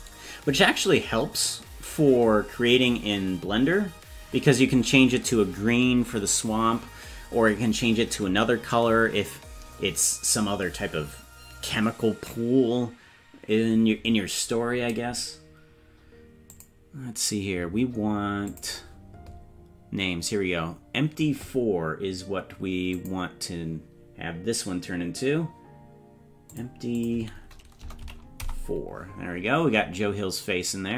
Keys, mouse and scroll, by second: 16.5 click, 18.5 click, 22.9 click, 26.5-29.0 drag.